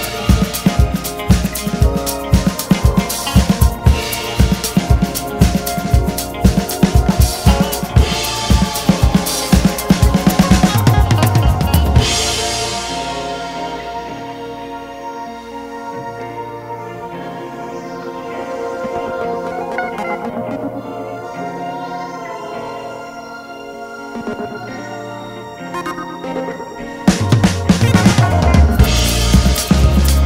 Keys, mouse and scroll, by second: 5.5 click, 5.7 `, 6.7 Tab, 8.0 2, 8.4 alt+click, 8.9 ctrl+b, 10.8 alt+s, 12.8 ctrl+r, 13.3 click, 13.6 alt+s, 16.5 shift+click, 17.3 1, 17.5 click, 17.8 alt+s, 20.8 click, 21.3 alt+s, 22.8 click, 23.0 shift+click, 23.7 alt+s, 25.0 `, 26.7 click, 27.5 alt+s, 29.5 shift+click.